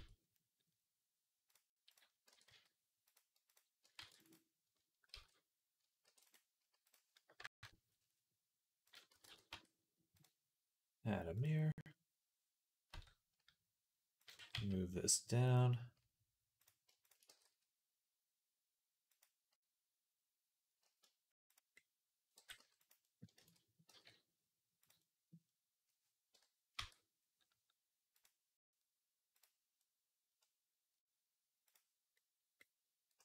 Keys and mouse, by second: 2.1 e, 3.6 ctrl+right click, 3.8 ctrl+r, 4.1-6.7 middle drag, 4.9 ctrl+z, 5.9 ctrl+r, 6.7-8.8 drag, 8.8-10.0 middle drag, 9.0 x, 9.4 Tab, 10.0-14.1 drag, 12.7 Tab, 14.1-21.6 middle drag, 14.2 g, 17.1 g, 21.8-23.2 middle drag, 22.2 g, 23.2 ctrl+z, 23.2 ctrl+click, 23.3 middle click, 23.7 g, 25.0-28.0 middle drag, 26.2 KP_1, 26.6 Tab, 28.0-29.6 drag, 29.7 click, 30.0-31.6 drag, 31.6-33.2 middle drag.